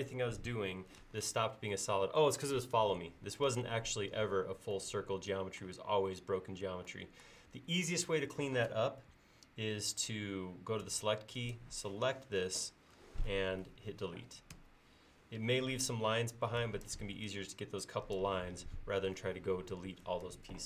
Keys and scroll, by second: 10.9 space, 14.6 Delete, 16.4 e.